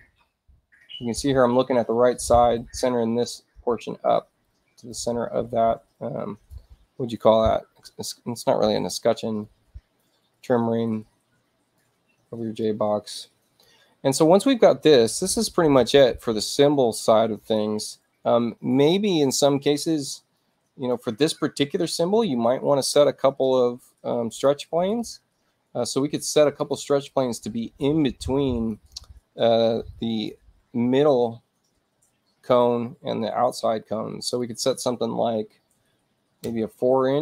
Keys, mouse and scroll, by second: 0.0-0.2 typing, 2.5 click, 4.4 click, 5.6 middle click, 5.9 click, 9.4-11.7 drag, 12.6 click, 17.3 click, 20.3 click, 24.2 click, 24.8 click, 26.5 click, 27.0-28.7 drag, 34.3 click.